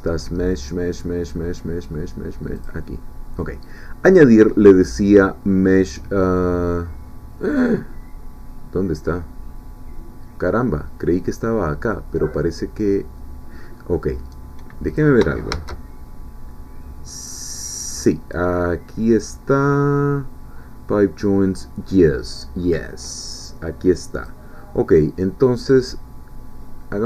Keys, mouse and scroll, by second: 2.6 click, 15.0 click, 15.5 shift+a, 23.4 click, 24.2 click.